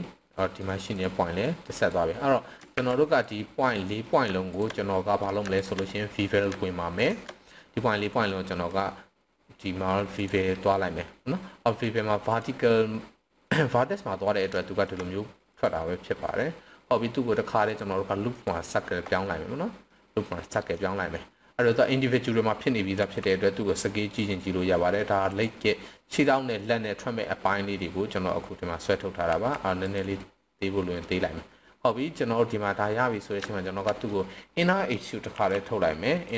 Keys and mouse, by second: 0.4 middle click, 1.4 click, 2.7 ctrl+z, 3.6-4.0 middle drag, 4.7-5.2 middle drag, 5.9-6.3 middle drag, 8.0 middle click, 8.7-10.2 right drag, 12.3 click, 14.6 shift+middle drag, 15.5-18.4 right drag, 19.2-19.9 middle drag, 20.5 middle click, 23.0 s, 25.2 drag, 25.6-26.3 middle drag, 26.6-28.9 middle drag, 29.3 s, 29.8 drag, 30.2-31.0 middle drag, 31.6-32.6 middle drag, 33.4 shift+middle click, 33.8 shift+middle click, 35.2 i, 36.2 click.